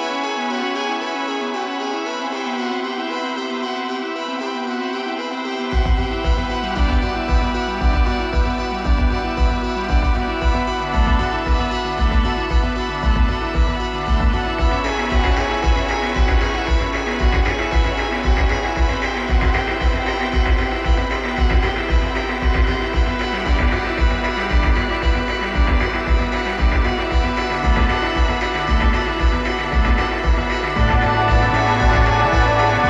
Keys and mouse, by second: 4.9-6.6 drag, 8.1-13.6 drag, 15.3-19.5 drag, 22.3-26.9 drag, 29.1-30.7 middle drag, 32.2-32.8 drag.